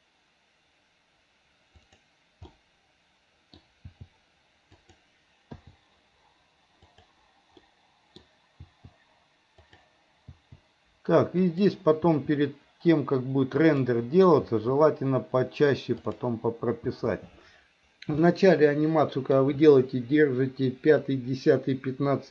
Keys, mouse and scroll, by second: 2.6-3.6 middle drag, 4.0 g, 5.6 i, 7.0 click, 7.7 middle click, 9.7 click, 10.4 i, 11.5 click, 12.1 i, 13.7 click, 14.6 i, 16.1 click, 17.0 i, 18.2-19.4 middle drag.